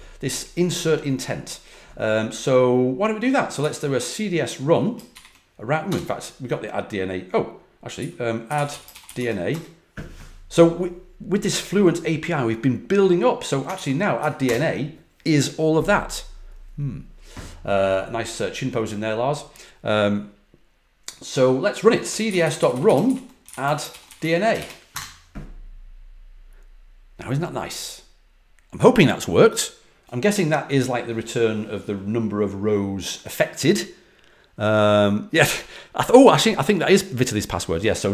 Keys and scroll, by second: 3.5 Up, 5.0 shift+0, 5.8 BackSpace, 7.9 Down, 8.2-9.5 typing, 13.7 ctrl+l, 14.1 Up, 14.4 Return, 21.7-24.5 typing, 24.8 Return.